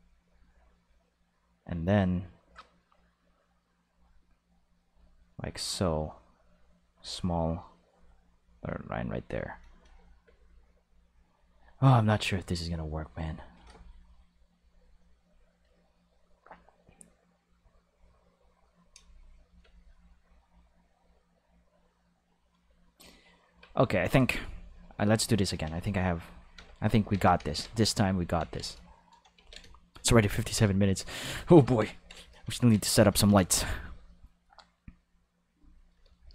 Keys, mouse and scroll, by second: 3.3 click, 4.8 click, 6.7 click, 7.9 click, 9.4 click, 9.6 space, 10.2 space, 10.3-12.0 drag, 12.9 click, 14.5 click, 18.7 click, 18.9 space, 19.6 space, 19.7-23.1 drag, 23.4 Tab, 23.8 a, 24.8 right click, 25.3 shift+right click, 25.6 ctrl+x, 25.7 click, 26.2 a, 26.5 x, 26.6 click, 27.1 ctrl+s, 27.9 click, 28.3 ctrl+s, 28.9 shift+click, 29.3 ctrl+s, 29.8 shift+click, 30.4 ctrl+middle click, 30.7 shift+middle click, 31.1 ctrl+middle click, 31.5 middle click, 31.9 ctrl+middle click, 35.5 click.